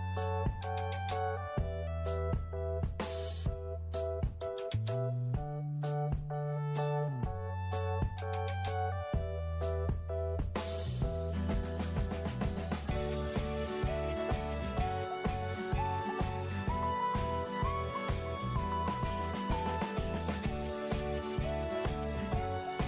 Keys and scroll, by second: 19.6 f.